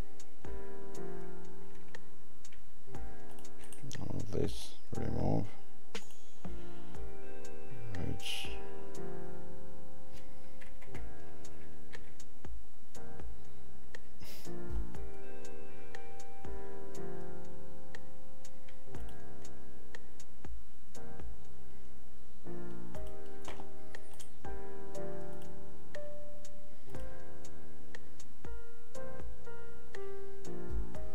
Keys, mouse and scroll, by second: 27.0 click.